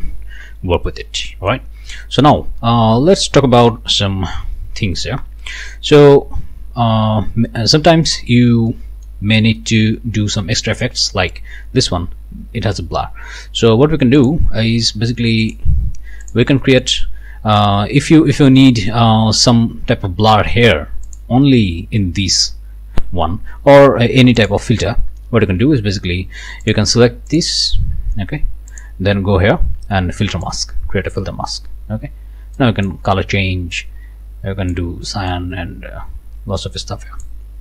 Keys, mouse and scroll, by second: 0.9 middle click, 1.8 scroll down 2, 2.2 middle click, 3.7 ctrl+middle click, 4.3 ctrl+s, 7.0 scroll up 2, 7.5 click, 8.7-9.3 scroll down 2, 9.6 click, 10.2 scroll down 2, 10.7 click, 14.2 click, 15.4 click, 16.2 click, 17.8 scroll up 1, 18.4 click, 21.1 click, 24.4 click, 26.6 click, 27.3 click, 28.7 click, 30.4 click, 32.6 click, 33.7-34.9 drag, 35.3-37.4 drag.